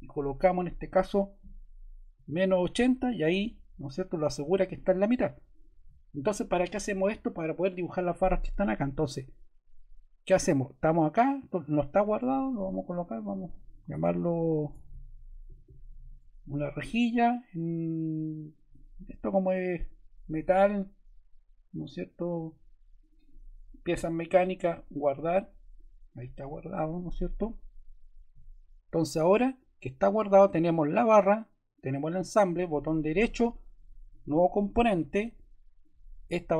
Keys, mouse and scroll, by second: 1.3-2.6 typing, 10.3 ctrl+z, 14.4-16.6 typing.